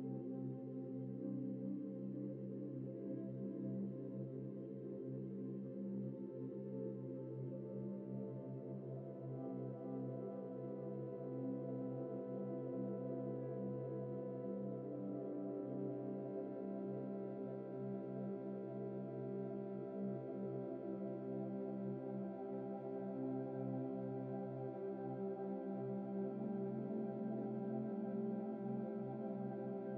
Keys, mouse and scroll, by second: 0.6 scroll down 1, 1.0 middle click, 2.3 F4, 4.0 Tab, 5.8 scroll down 1, 7.1-7.5 scroll up 1, 9.2 g, 9.9 double click, 10.1 g, 14.1 ctrl+l, 14.6-15.2 scroll down 1, 17.3 typing, 20.4 shift+click, 21.1 ctrl+l, 21.8 scroll up 1, 23.1 g, 28.3 ctrl+l, 28.7 g, 29.7 shift+middle click.